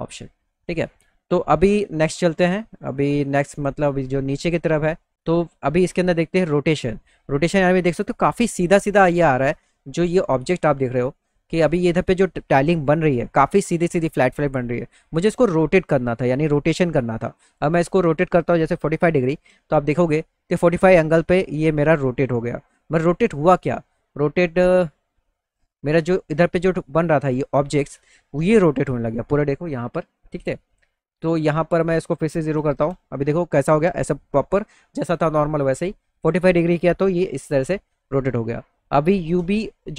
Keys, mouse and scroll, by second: 7.5 middle click, 8.0 middle click, 8.7 middle click, 9.0 middle click, 9.6-10.9 alt+middle drag, 11.3-12.6 middle drag, 13.1 middle click, 17.0 click, 22.9 middle click, 23.7-25.9 middle drag, 26.9 middle click, 27.3 middle click, 27.4 middle click, 31.3 click.